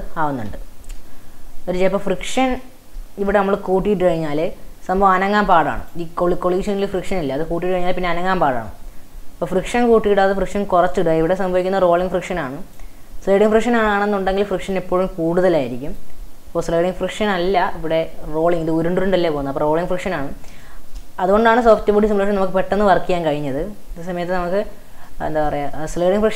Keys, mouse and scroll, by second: 0.5 space, 2.0 click, 2.6-5.8 shift+middle drag, 5.8 click, 8.8-10.5 scroll down 3, 12.2 drag, 13.3 click, 14.6 click, 15.8 click, 20.7-24.5 shift+middle drag, 25.5-26.3 middle drag.